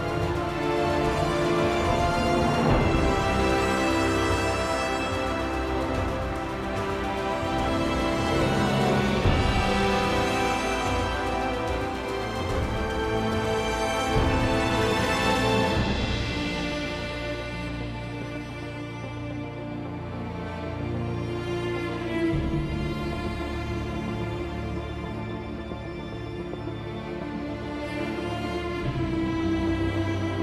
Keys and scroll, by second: 1.1-2.2 typing.